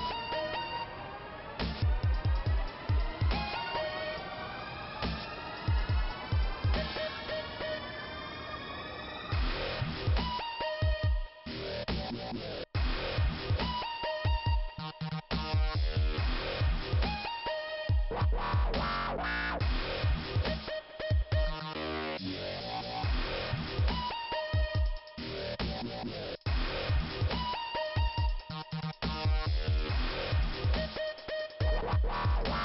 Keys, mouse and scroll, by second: 1.6 click, 4.5 right click, 4.9 ,, 5.6 click, 6.5 click, 7.3 click, 8.8 click, 11.5 click, 19.4 right click, 20.8 right click, 23.5 click, 23.8 click, 25.5 click, 25.7 click, 26.1 click, 29.1 click, 30.8 p, 31.5 scroll down 2.